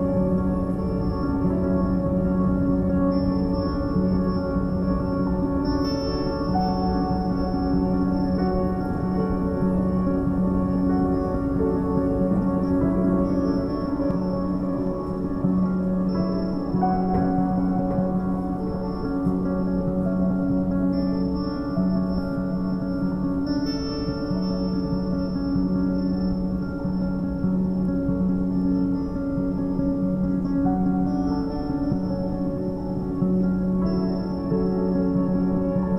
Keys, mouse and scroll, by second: 1.1-2.1 scroll down 1, 3.0 ctrl+3, 4.5 right click, 5.2 scroll down 2, 5.8 KP_1, 6.7-7.4 scroll up 2, 7.7 s, 8.7-9.1 scroll up 1, 9.1 s, 10.6 scroll up 1, 10.8-11.2 scroll down 1, 11.2 g, 12.4 scroll up 1, 12.6-13.1 shift+middle drag, 13.1-13.6 scroll up 3, 13.6 s, 15.7-16.6 scroll down 1, 16.6-16.9 scroll up 3, 16.9 g, 19.0 a, 19.2 a, 20.2 shift+a, 25.5-27.2 scroll down 6, 27.2-31.5 drag, 32.6-33.7 scroll up 9, 33.7-35.0 shift+middle drag, 35.0-35.9 shift+drag.